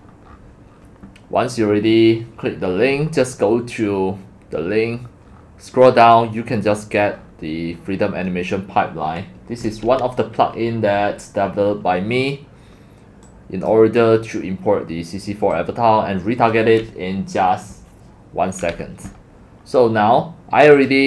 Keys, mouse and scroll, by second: 0.6 scroll, 2.2-3.2 scroll down 7, 3.2 scroll, 5.3-5.6 scroll down 7, 5.6 scroll, 7.1 scroll, 7.2 scroll up 1, 7.2 scroll, 7.3 scroll, 7.5-10.1 middle drag, 13.2-14.7 drag, 15.7 click, 18.8 click, 20.9 click.